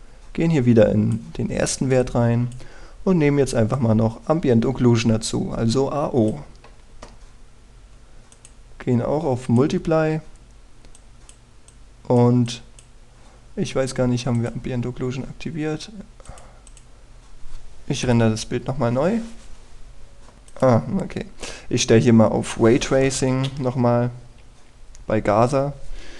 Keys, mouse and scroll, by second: 8.3-8.7 scroll up 1, 9.3-18.7 drag, 19.0 F12, 20.3-21.4 scroll down 1, 21.4 click, 21.9-23.3 scroll up 1, 24.3 Escape.